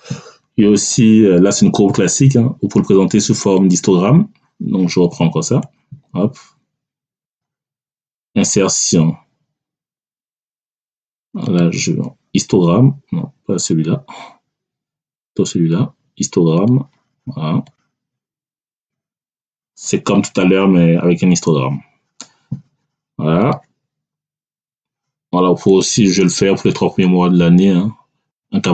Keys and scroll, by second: 3.9 Delete, 24.4 Delete.